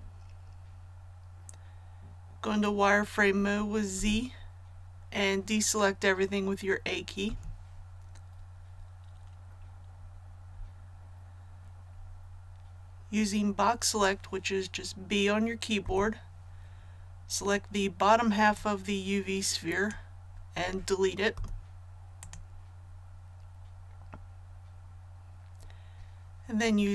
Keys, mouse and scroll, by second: 3.9 z, 7.2 a, 8.2-8.6 scroll up 1, 15.8 b, 18.5-20.5 drag, 21.3 x, 22.1 click.